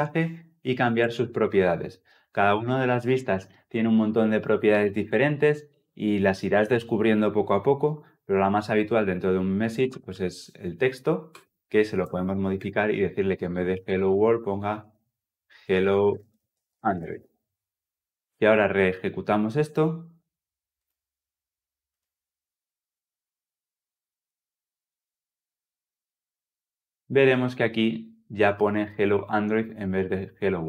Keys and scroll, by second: 0.8 Return, 11.2 Return, 20.7 shift+F10.